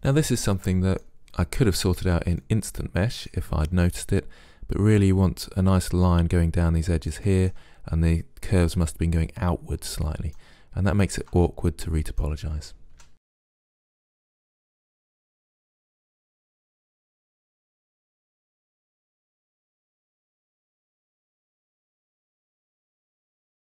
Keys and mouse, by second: 0.8-2.1 middle drag, 2.5-4.4 middle drag, 6.7-9.2 middle drag, 9.9-11.1 middle drag, 11.1 right click, 13.0 Delete, 14.9 middle click, 15.1 Delete, 15.3 middle click, 16.0-17.1 middle drag, 17.1 Delete, 18.1 right click, 18.3 middle click, 18.6 Delete, 19.1 right click, 19.2 click, 19.3 right click, 19.4 click, 19.6 middle click, 20.0 Delete, 22.0 middle click, 22.3 click, 22.5 Delete, 22.7 middle click, 23.6 middle click.